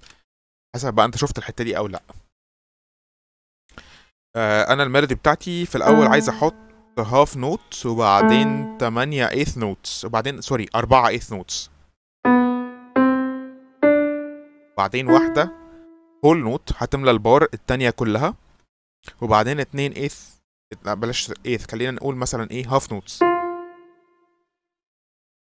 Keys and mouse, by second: 2.0 Delete, 5.7 click, 6.5-7.3 drag, 8.1 click, 9.0-10.3 drag, 12.1 click, 12.8 click, 13.7 click, 15.0 click, 16.2 click, 23.1 click, 24.2-25.5 drag.